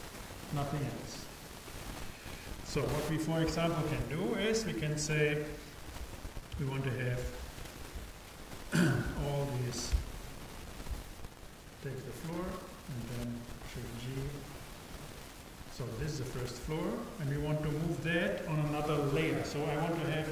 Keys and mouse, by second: 10.0 a, 12.1-15.2 drag, 13.7 shift+g.